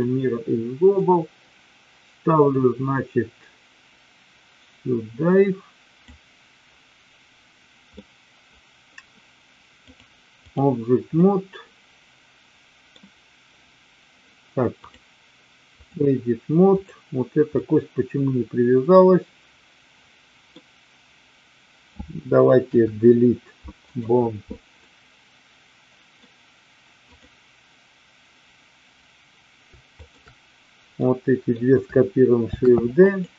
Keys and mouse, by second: 1.0-6.0 drag, 7.9 middle click, 9.9-10.6 drag, 11.2-12.8 middle drag, 14.8-15.9 drag, 16.8 click, 17.5-20.5 middle drag, 22.6 Delete, 24.8-26.1 middle drag, 27.1 click, 29.9 shift+click, 30.9 middle click, 32.5 shift+d, 33.1 click.